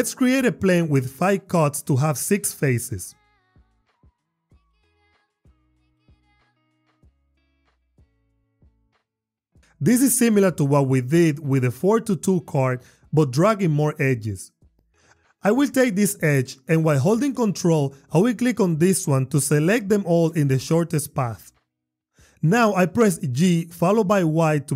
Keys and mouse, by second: 0.2 shift+a, 4.6 Tab, 5.5 ctrl+r, 6.3 click, 6.4 click, 6.7 ctrl+r, 7.0 click, 17.2 ctrl+click, 22.4 g, 23.5 y.